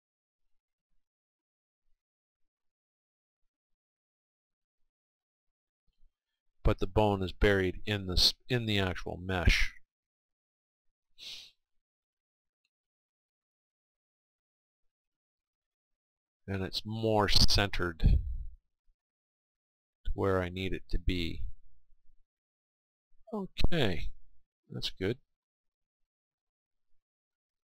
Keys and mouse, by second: 1.0-2.9 right drag, 1.9 click, 2.6-6.1 middle drag, 2.9 r, 6.4-8.1 right drag, 7.2 click, 8.1-10.1 middle drag, 12.2-15.6 middle drag, 22.6-27.6 middle drag.